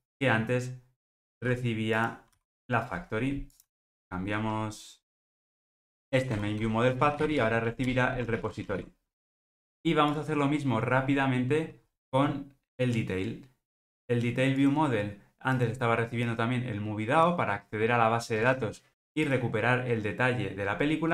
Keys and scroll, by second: 1.3 super+x, 3.4 super+v, 7.9 Return, 8.3 alt+super+l, 8.7 ctrl+alt+o.